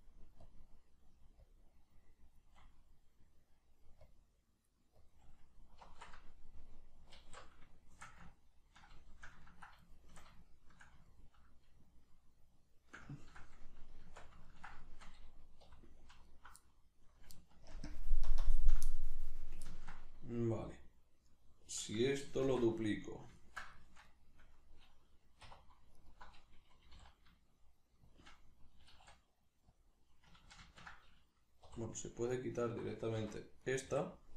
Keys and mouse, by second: 2.9-4.1 middle drag, 4.1-6.7 drag, 6.7-16.3 middle drag, 7.2 alt+q, 14.1 Tab, 15.7 3, 16.3 alt+right click, 16.7-22.9 middle drag, 17.7 ctrl+KP_Add, 18.3 ctrl+KP_Subtract, 22.5 shift+d, 22.9 right click, 23.4-25.9 ctrl+middle drag, 25.5 2, 25.9 alt+right click, 26.9 g, 28.1 shift+click, 28.9 e, 29.9 click, 30.5 ctrl+z, 31.7 3, 32.3 alt+right click, 33.2 c, 33.7 right click, 33.9 x.